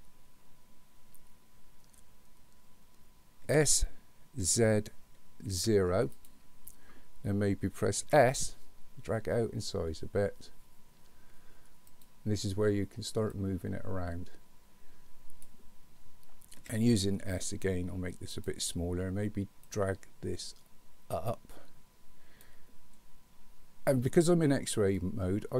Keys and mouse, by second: 3.5 s, 8.0 s, 13.4-15.4 drag, 16.6 s, 19.8-22.5 drag, 24.9-25.5 middle drag.